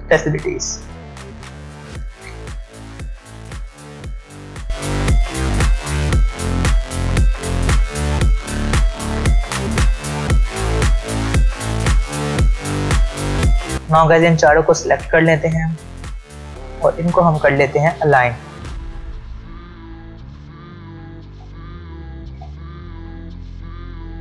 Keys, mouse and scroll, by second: 4.7 Caps_Lock, 5.1 Return, 5.2 typing, 5.7 alt+scroll up 1, 6.0-7.1 alt+scroll down 4, 7.1 alt+click, 7.8 e, 8.1 Left, 8.5 Return, 8.6 click, 8.9 Return, 9.1-13.7 typing, 9.7 click, 9.9 Up, 10.3 click, 11.5 click, 12.0 click, 12.1 Left, 12.4 click, 13.7 click, 21.2-23.0 scroll down 1, 23.1 click.